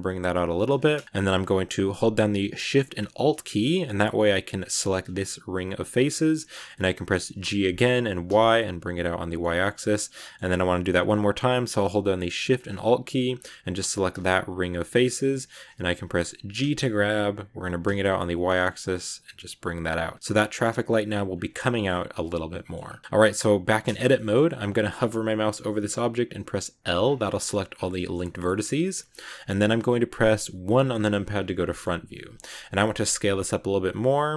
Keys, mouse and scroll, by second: 0.9-3.9 shift+middle drag, 4.6 alt+shift+right click, 5.8-7.3 middle drag, 7.3 g, 9.6 scroll down 1, 9.7-12.7 middle drag, 13.9 alt+shift+right click, 14.9 scroll up 1, 15.0-16.5 middle drag, 16.5 g, 20.0 Tab, 20.1 scroll down 1, 20.1 scroll up 1, 21.2 scroll down 2, 21.4 middle click, 22.0 middle click, 22.6-22.9 scroll up 3, 22.8 Tab, 22.9 middle click, 23.0 a, 23.8-26.7 shift+middle drag, 26.7 l, 26.9 scroll down 4, 27.1-28.6 middle drag, 28.6-29.1 scroll up 1, 30.5 KP_1, 31.6 shift+middle click, 32.0-32.3 scroll up 1, 32.3-32.7 scroll down 1, 32.7 s.